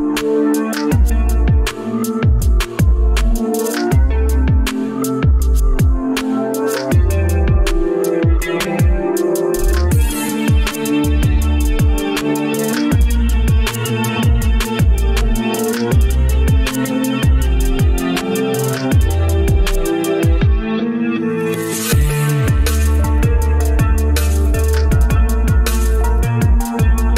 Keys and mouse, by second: 1.9 Tab, 1.9-5.0 middle drag, 8.1 shift+middle click, 9.5 shift+middle click, 14.1 alt+z, 20.1 Tab, 20.1 1, 21.4 1, 23.6 g, 26.8 Tab.